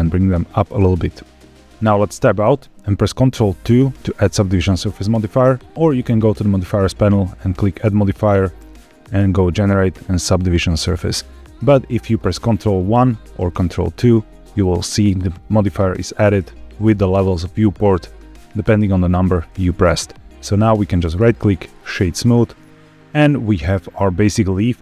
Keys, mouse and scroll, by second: 1.6 click, 1.6 middle click, 2.0 Tab, 3.5 ctrl+2, 5.9 click, 8.0-10.8 drag, 12.9 ctrl+1, 13.7 ctrl+2, 20.5 right click, 22.2-24.8 middle drag.